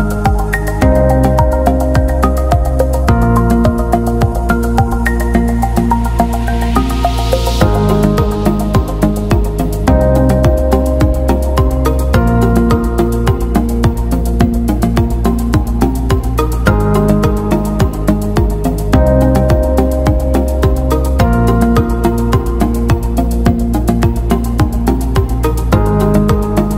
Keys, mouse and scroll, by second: 0.0 alt+Tab, 1.6 click, 1.9 a, 3.6 click, 5.8 scroll down 1, 8.0 ctrl+a, 8.9 click, 17.5 click, 18.0-18.3 alt+scroll down 1, 19.7 click, 21.6 ctrl+c, 22.4 click, 23.3 t, 23.8 click, 25.2 ctrl+v, 26.4 click.